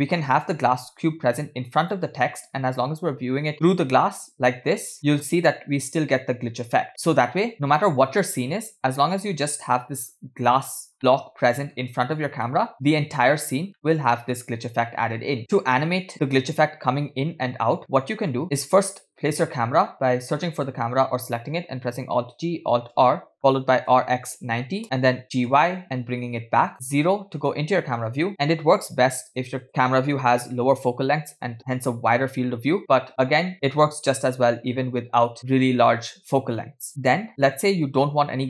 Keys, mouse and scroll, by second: 0.5 g, 2.3-3.6 middle drag, 3.6-4.0 scroll up 2, 4.6-6.8 middle drag, 6.9 scroll down 2, 7.1-7.5 scroll up 1, 9.0-9.4 middle drag, 9.8-10.2 middle drag, 10.6-11.0 drag, 11.0-11.8 middle drag, 12.5-13.0 middle drag, 13.7 scroll down 1, 13.8 middle click, 14.2-15.4 scroll up 2, 14.6 space, 15.4 middle click, 15.4 space, 18.4 click, 18.9-19.8 scroll down 4, 19.8-20.5 scroll up 1, 20.6 click, 22.3 alt+g, 23.0 alt+r, 23.9 r, 25.5 g, 26.8 KP_0, 28.3-29.7 drag, 33.5 g, 37.7 click.